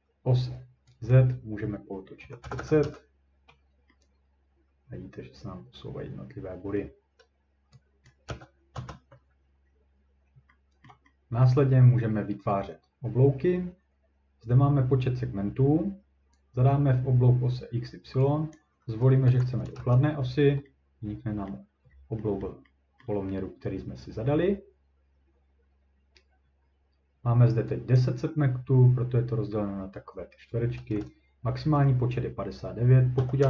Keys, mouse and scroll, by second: 1.1 click, 2.0-2.7 typing, 2.8 Return, 4.9-6.0 ctrl+drag, 4.9 typing, 6.2 typing, 6.8 scroll, 8.1 click, 8.3 typing, 8.7 Return, 9.2-10.5 scroll, 10.9-11.4 ctrl+scroll, 16.0-16.4 scroll down 1, 18.6 click, 19.2 typing, 19.7 Return, 21.5 middle click, 21.9-22.3 scroll up 2, 22.4 middle click, 23.0 ctrl+middle click, 26.5 scroll, 28.0 click, 30.5-33.0 drag, 32.9-33.4 typing.